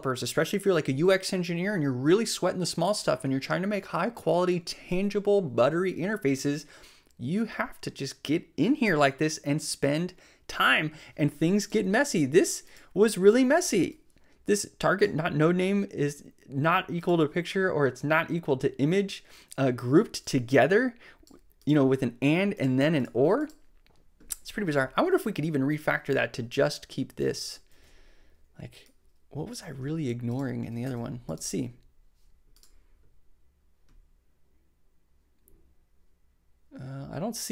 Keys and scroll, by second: 27.7 super+x, 29.5 super+v, 30.8 super+s.